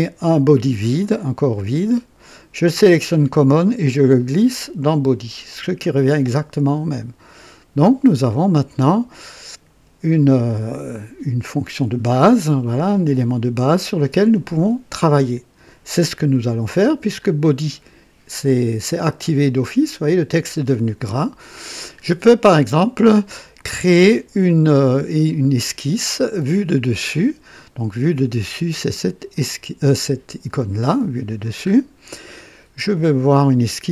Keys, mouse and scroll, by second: 1.0 click, 3.1-5.8 drag, 17.1 click, 21.3 click, 23.6-24.9 drag, 29.3 click, 30.8 right click, 31.6-32.1 scroll up 1, 32.2 right click.